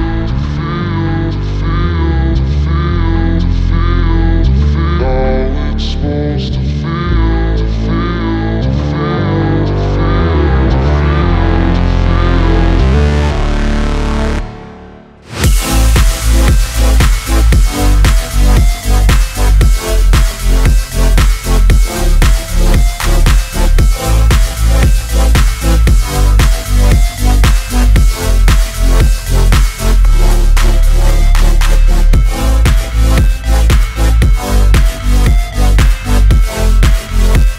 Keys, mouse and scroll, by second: 3.2 ctrl+d, 6.1 ctrl+z, 9.7 scroll down 1, 10.2 scroll up 1, 10.8 click, 11.7 scroll down 1, 12.7 shift+click, 13.3 click, 14.4 ctrl+z, 15.0 scroll down 1, 15.9 ctrl+click, 16.3 click, 17.6 scroll up 1, 18.4 shift+click, 19.4-20.1 scroll down 1, 20.1 click, 21.0 p, 21.8 alt+click, 22.4-27.6 typing, 25.1 Left, 27.9 click, 28.4 ctrl+d, 29.1-32.7 drag, 32.7 ctrl+s, 33.3 ctrl+d, 34.1 ctrl+click, 34.5 click, 35.2 ctrl+z, 36.2 click, 37.0 ctrl+d.